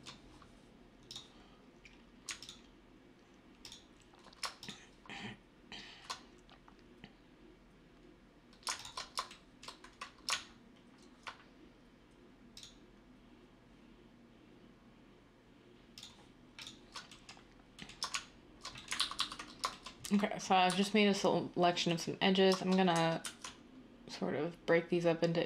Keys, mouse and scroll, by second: 18.9 ctrl+z, 19.1 ctrl+z, 20.6 z, 23.2 ctrl+b.